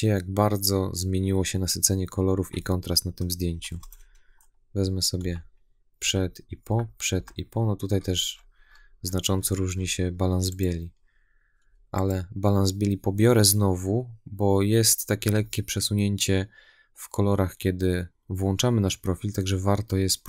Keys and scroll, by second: 5.0 \.